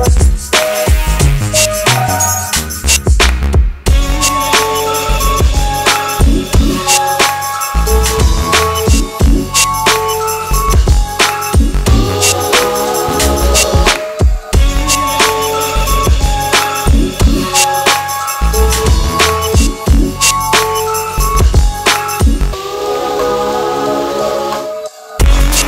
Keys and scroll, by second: 7.4 c, 8.1 e, 17.1 c, 17.5 e.